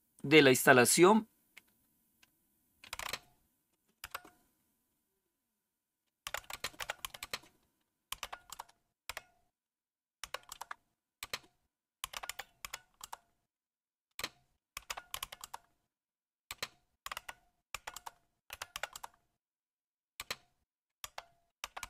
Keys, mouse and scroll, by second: 2.7-3.9 typing, 5.9-9.1 typing, 10.1-20.1 typing, 21.3-21.8 typing.